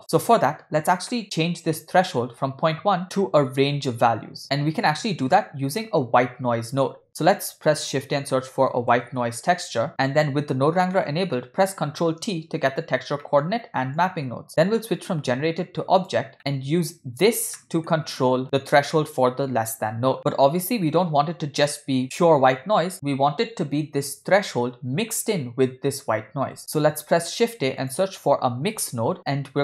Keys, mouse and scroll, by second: 0.0 click, 1.1 middle click, 5.8 middle click, 6.1 scroll up 1, 6.4-6.8 scroll down 2, 6.9 shift+a, 11.6 ctrl+t, 13.2 middle click, 14.0 click, 15.6-16.2 drag, 16.3 middle click, 16.3-16.9 scroll down 4, 17.5 scroll down 1, 17.6 middle click, 18.4 click, 19.9 click, 20.8-21.5 scroll up 5, 26.6 middle click, 26.6 click, 26.6 x, 27.3 shift+a.